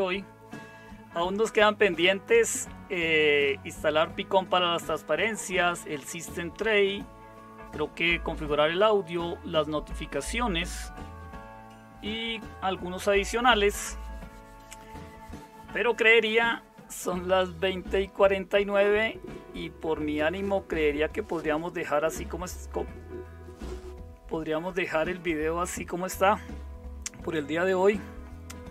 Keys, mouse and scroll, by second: 0.0-28.7 typing.